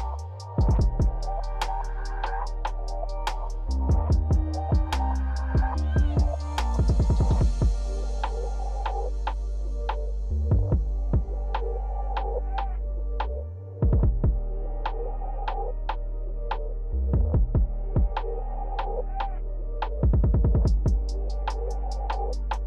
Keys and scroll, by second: 6.5 f.